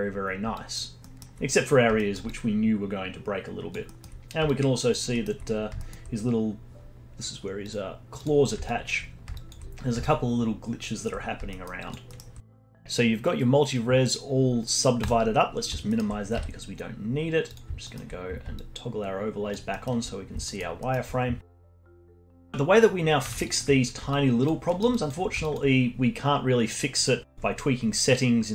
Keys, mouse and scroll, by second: 0.5-1.0 alt+drag, 1.0-1.3 alt+middle drag, 1.3-2.0 scroll up 2, 2.0-2.3 alt+middle drag, 2.3-3.9 alt+drag, 3.9 alt+middle drag, 4.1-4.5 scroll up 4, 4.5-5.1 alt+drag, 5.1-5.5 alt+middle drag, 5.5 scroll up 1, 5.8-7.6 alt+middle drag, 7.6 click, 8.2 click, 8.6-9.8 alt+drag, 9.8 scroll down 3, 10.0-11.2 alt+drag, 11.2-11.5 scroll down 2, 11.5 alt+middle click, 11.8 alt+click, 12.1 alt+middle click, 15.0-15.9 drag, 15.9-16.3 alt+middle drag, 16.3 z, 17.8-18.2 alt+middle drag, 18.2 scroll up 2, 18.5-19.7 alt+drag, 19.7 alt+middle click, 20.0 scroll up 2, 20.4-21.2 alt+middle drag, 21.2 scroll down 1, 21.6-21.9 alt+drag, 21.9 alt+middle click, 22.5-23.4 alt+drag, 23.4 alt+middle drag, 23.7-24.1 scroll up 3, 24.1-24.7 alt+drag, 24.7 alt+middle drag, 24.9-25.7 alt+drag, 25.7-26.5 scroll down 1, 26.5-27.3 scroll down 1, 27.3 scroll down 1, 27.3 alt+middle click, 27.6-28.5 alt+drag.